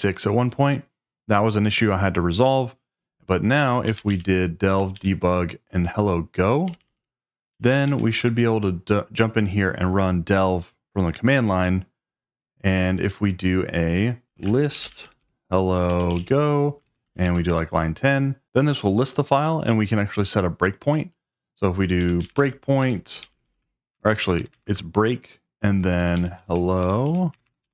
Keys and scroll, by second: 3.6-4.6 typing, 4.9 Right, 6.7 Left, 6.8 Left, 6.9 Left, 7.5 Right, 7.7 Right, 7.8 Right, 8.2 Return, 14.0-17.7 typing, 21.7-24.7 typing, 25.8-27.7 typing.